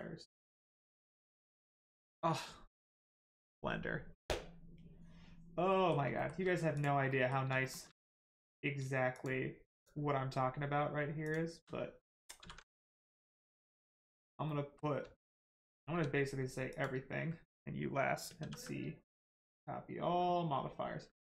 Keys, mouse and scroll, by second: 0.8 middle click, 1.8 shift+middle click, 5.7 middle click, 6.1 shift+middle click, 6.7 click, 7.1 middle click, 7.6 shift+middle click, 7.9 middle click, 9.1 shift+click, 9.7 shift+click, 11.2 shift+click, 12.4 ctrl+c, 13.2 click, 13.8 middle click, 15.2 shift+middle click, 15.6 scroll down 1, 15.9 a, 19.1 click.